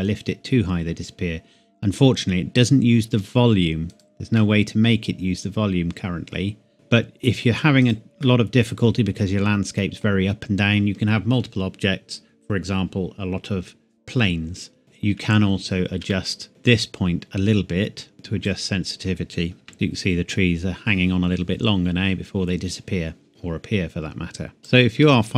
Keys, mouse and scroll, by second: 3.9 click, 4.4 middle click, 6.7 g, 7.8 click, 8.2 middle click, 14.8 click, 15.2-16.0 scroll up 1, 16.1 shift+middle click, 16.5-17.5 scroll up 1, 17.5-18.1 scroll down 1, 18.1 click, 19.6 KP_0, 21.9 scroll down 1, 22.7 scroll up 1, 23.3 scroll down 1, 23.4 scroll up 1, 24.6 click, 25.0 middle click.